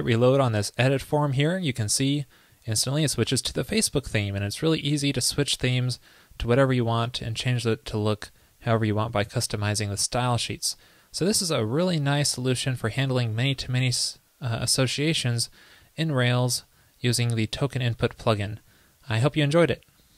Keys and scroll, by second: 1.1 super+r.